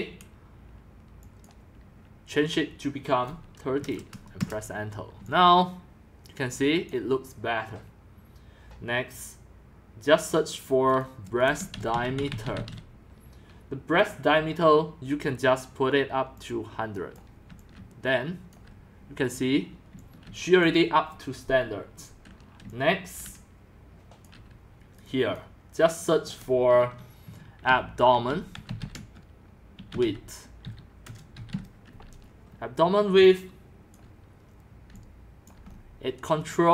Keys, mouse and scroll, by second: 1.2 click, 3.5-6.3 typing, 3.8 click, 4.4 Return, 6.4-7.0 scroll down 27, 7.0-9.5 drag, 9.5 typing, 11.0 click, 11.5-13.2 typing, 12.3 click, 12.5 click, 13.6 drag, 14.1-14.6 drag, 16.4-17.1 drag, 17.2-20.4 typing, 17.8-18.4 drag, 20.7 click, 21.3-22.6 drag, 22.6-24.9 typing, 24.3 drag, 25.0-27.2 drag, 27.0-31.9 typing, 32.5 scroll down 2, 33.1-35.5 typing, 35.7 middle click, 35.7 scroll, 35.9 scroll, 36.1-36.7 middle drag, 36.1 scroll, 36.2 scroll, 36.4 scroll, 36.5 scroll.